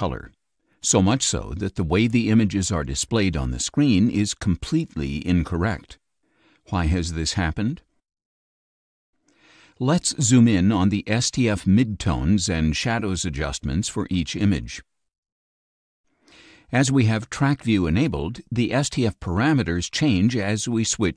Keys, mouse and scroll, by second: 1.7-3.3 drag, 9.3-10.7 scroll down 12, 15.8 click, 17.1 click, 18.5 click, 19.6 click, 21.0 click.